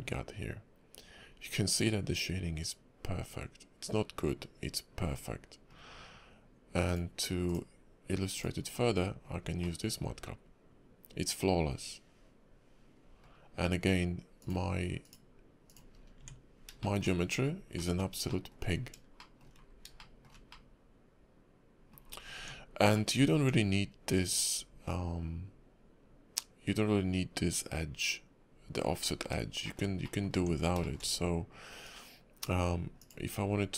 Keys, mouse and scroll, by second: 6.8 click, 8.7 scroll down 3, 9.6 middle click, 14.4 click, 16.0 scroll up 3, 16.2 Tab, 16.8 shift+middle click, 17.3 scroll up 2, 17.7 middle click, 18.3 shift+middle click, 19.2 shift+middle click, 19.6-20.4 scroll down 4, 20.0 shift+middle click, 20.5 middle click, 22.0 scroll up 1, 22.1 scroll down 2, 22.4 Tab, 22.9 middle click, 23.2 scroll up 2, 23.3 Tab, 23.8 scroll up 2, 24.5 scroll up 4, 28.9-29.4 scroll down 7, 29.6 shift+middle click, 30.0 middle click, 30.3 Tab, 30.8 shift+middle click, 31.8 click, 33.3 scroll up 3.